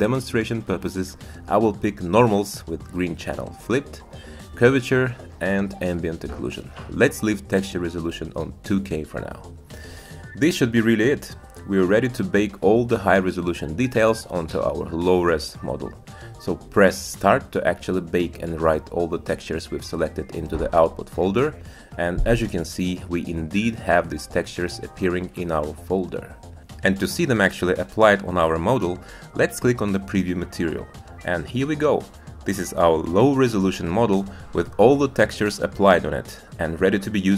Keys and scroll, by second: 25.0 Tab.